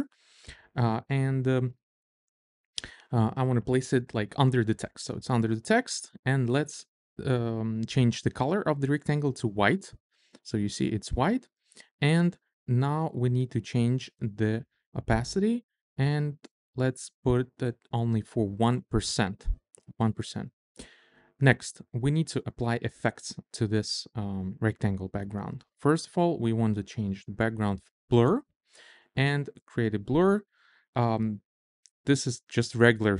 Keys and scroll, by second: 9.3 f, 10.1 Return, 19.5 1, 19.7 Return.